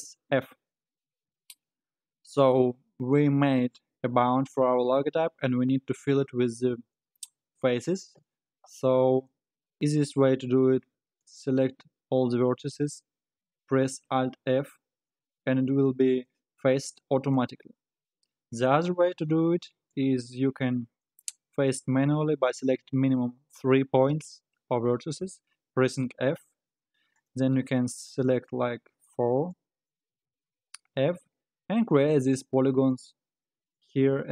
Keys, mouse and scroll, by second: 0.3 f, 11.2 alt+click, 14.0 alt+f, 19.1 ctrl+z, 19.9 click, 27.2 click, 27.7 shift+click, 28.2 shift+click, 29.0 shift+click, 29.5 shift+click, 30.3 f, 31.2 click, 32.3 f, 33.1 click, 33.9 f.